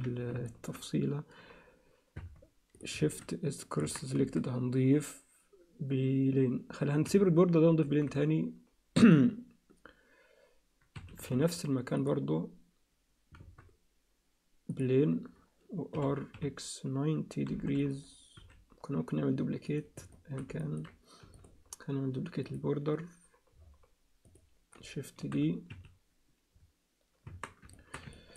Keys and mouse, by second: 0.5 alt+shift+middle click, 2.2 Tab, 3.0 shift+s, 3.8 Tab, 4.2 shift+a, 7.9 shift+a, 11.3 shift+s, 13.4 shift+a, 16.0 r, 18.4 s, 20.1 alt+shift+middle click, 20.6 ctrl+alt+middle click, 21.2 x, 22.5-24.3 drag, 25.2 shift+d, 27.3 Tab, 27.7 alt+shift+middle click, 28.1 ctrl+alt+click.